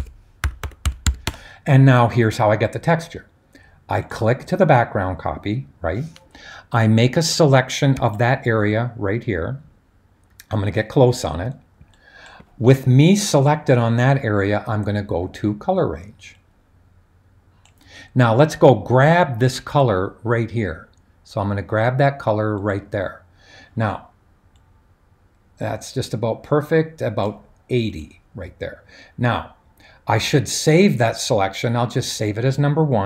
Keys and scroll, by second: 0.0-1.6 typing, 3.9 typing.